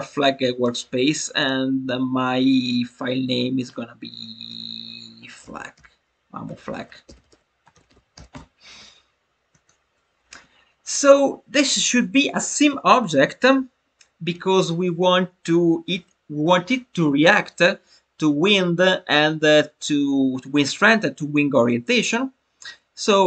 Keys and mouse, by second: 1.3-8.9 drag, 9.4 click.